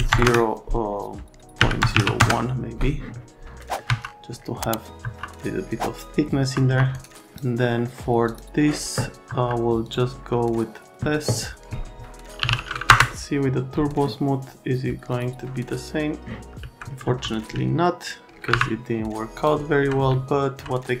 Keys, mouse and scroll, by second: 0.1 KP_0, 0.2 KP_Enter, 1.6 KP_Decimal, 1.8 KP_0, 1.9 KP_1, 2.2 KP_Enter, 3.6 middle click, 3.8 F3, 6.4 F3, 6.7 F3, 6.9 scroll up 1, 7.7 right click, 8.2 click, 9.3 F3, 9.8 click, 12.1-12.9 typing, 15.1 click, 15.8 click, 16.6 alt+middle drag, 17.0 F3, 17.8 alt+right click, 18.5 Delete, 19.3 click, 20.1 alt+right click.